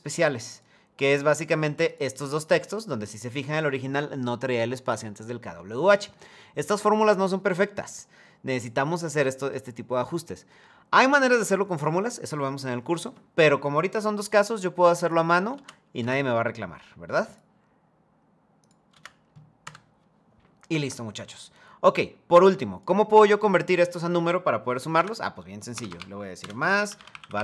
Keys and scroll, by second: 15.7 Return, 19.3 Return, 25.4 BackSpace, 25.6 BackSpace.